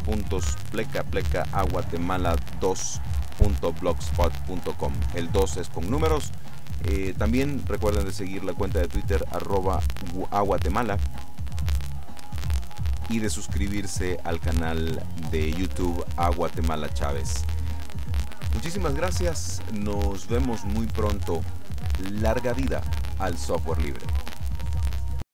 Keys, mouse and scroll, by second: 24.8 click.